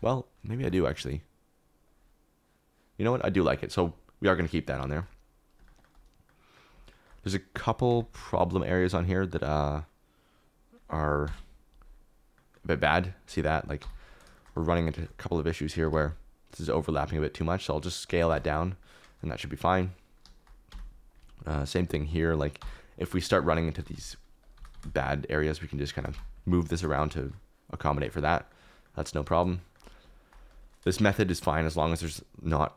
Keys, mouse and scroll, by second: 0.5 Tab, 1.8 click, 3.1-4.3 middle drag, 4.5 shift+middle click, 5.0-6.3 middle drag, 6.4 middle click, 6.9 shift+middle click, 7.9 Tab, 8.1 3, 8.9 KP_Decimal, 11.2 ctrl+l, 13.8 l, 14.3 shift+middle click, 15.8 s, 16.0 z, 18.3 Tab, 19.4 click, 20.7 Tab, 21.8 click, 22.6-24.7 typing, 23.1 click, 23.3 middle click, 24.4 click, 26.1 Tab, 30.5 click, 30.9 shift+middle click, 31.1 middle click, 31.2 click.